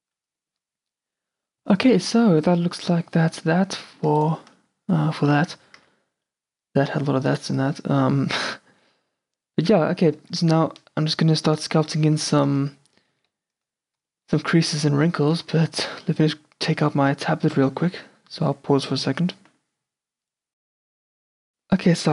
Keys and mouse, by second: 5.5 q, 5.9 a, 10.4 q, 12.3-15.8 drag, 12.7 Tab, 14.6 a, 15.8-18.1 middle drag.